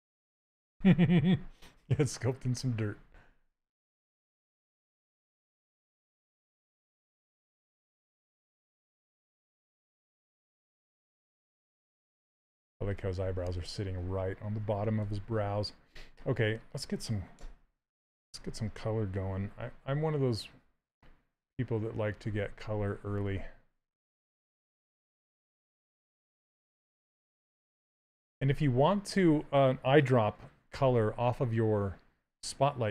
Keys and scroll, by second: 4.9 s, 7.3 s, 18.9 z, 21.6-22.5 typing, 27.3 c, 27.7 z.